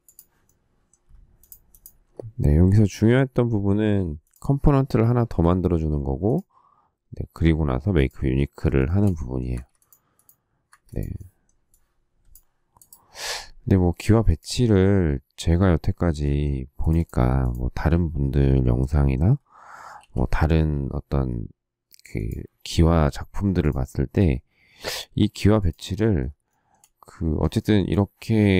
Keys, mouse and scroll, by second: 2.9 q, 5.0 shift+middle click, 8.8 shift+middle click, 9.3 space, 9.5 Escape, 10.8 Escape, 19.9 q, 26.4 shift+middle click, 27.5 shift+middle click, 27.7 shift+middle click.